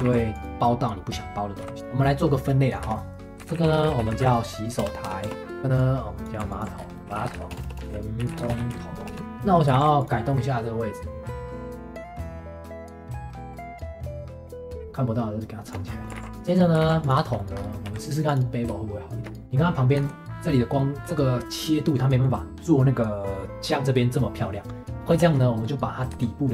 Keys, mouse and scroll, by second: 0.0 ctrl+s, 1.6 m, 5.2 Return, 5.6 shift+middle click, 5.8 click, 6.8 scroll up 1, 6.9 middle click, 7.0 m, 7.6 Return, 7.8 Return, 7.8 m, 9.2 shift+click, 9.4 shift+middle click, 9.7 ctrl+s, 10.3-10.6 scroll down 1, 10.6 middle click, 11.5 scroll up 3, 12.2 click, 12.2 g, 12.4 shift+middle click, 12.5 click, 12.7 right click, 12.8 g, 13.1 g, 13.3 middle click, 13.3 ctrl+s, 13.4 middle click, 13.5 middle click, 13.6 ctrl+s, 13.9 click, 13.9 ctrl+s, 14.0 scroll up 2, 14.0 shift+middle click, 14.1 ctrl+s, 14.5 click, 14.6 s, 14.8 g, 15.8 scroll down 2, 16.0 middle click, 16.2 ctrl+s, 16.3 click, 16.5 shift+middle click, 16.8 ctrl+s, 17.2-17.5 shift+middle drag, 17.5 scroll up 1, 17.8 q, 19.4 middle click, 19.9 Tab, 20.8-23.7 middle drag, 25.2 shift+middle click, 26.1 Tab.